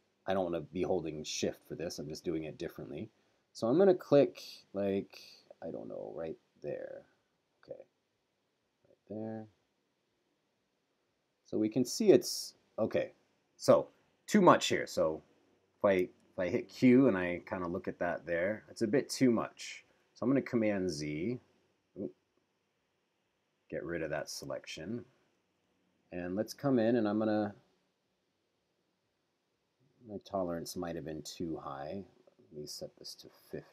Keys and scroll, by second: 14.5 q, 16.2 super+-, 19.1 q, 20.7 super+z, 21.9 super+z, 23.2 super+z, 24.7 super+=, 32.8-33.7 typing.